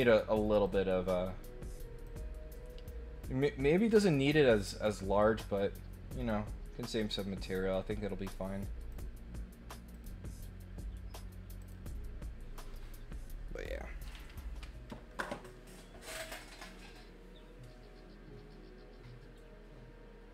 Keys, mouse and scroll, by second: 0.6 click, 2.0 click, 8.9 click, 9.9 click, 11.5 click.